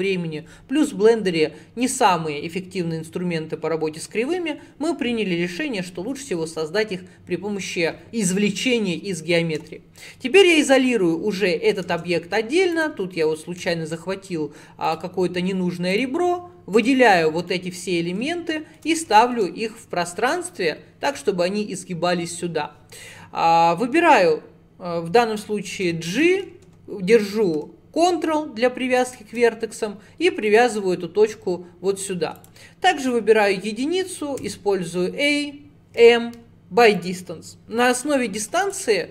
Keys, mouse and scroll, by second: 9.6 /, 10.5 /, 11.6 scroll up 1, 12.0 Tab, 12.8 click, 13.7 x, 16.0 click, 16.8 l, 17.5-19.4 middle drag, 19.4 scroll down 1, 19.6-23.1 scroll up 7, 25.9 g, 30.5 click, 31.3-32.4 scroll up 1, 32.4 click, 33.2 1, 34.5 a, 36.0 m, 38.0 click.